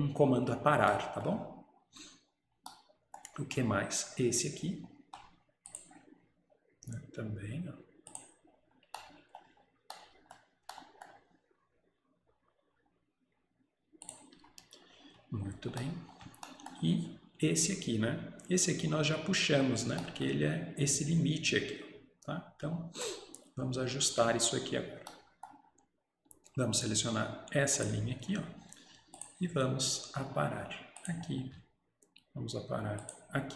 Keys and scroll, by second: 14.4 Escape.